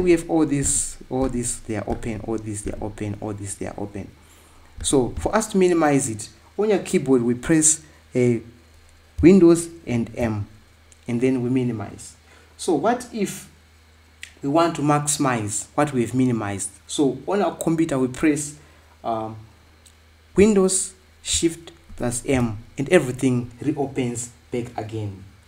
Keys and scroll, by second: 22.7 shift+super+m.